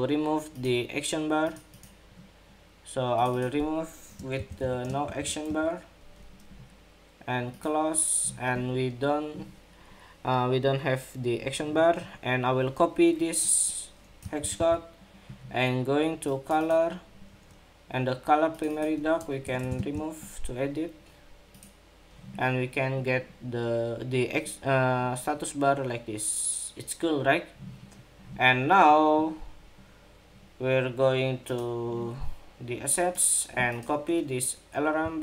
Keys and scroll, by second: 14.1 super+c, 14.3 super+c, 19.5 super+v, 35.0 super+c.